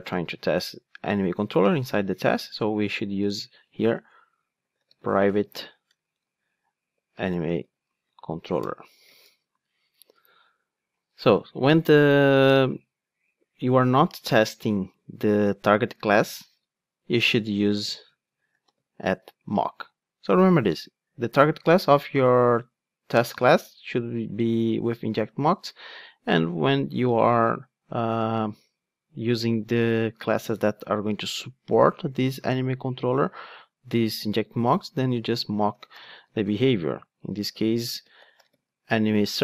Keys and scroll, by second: 8.6 Return, 19.2 Return.